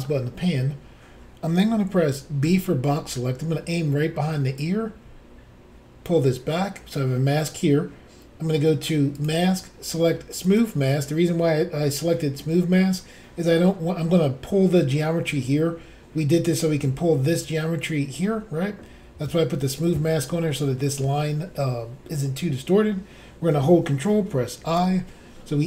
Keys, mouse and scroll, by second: 2.5 b, 4.6 click, 9.2 click, 9.2 click, 10.5 click, 10.6 click, 24.7 ctrl+i.